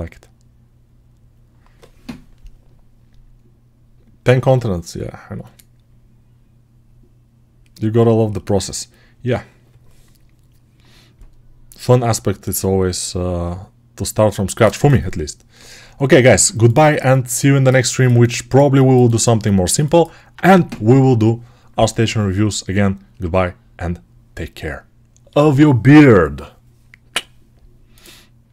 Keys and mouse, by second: 26.5-28.5 right drag.